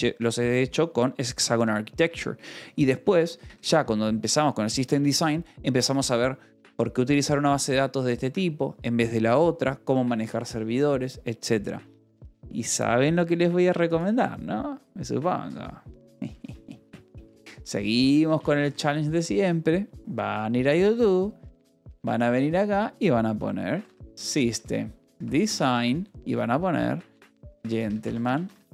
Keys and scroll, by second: 0.0-0.2 typing, 2.0 Escape, 2.3-3.8 typing, 4.9 Escape, 16.8-19.0 typing, 20.7-22.2 typing, 23.4-28.7 typing.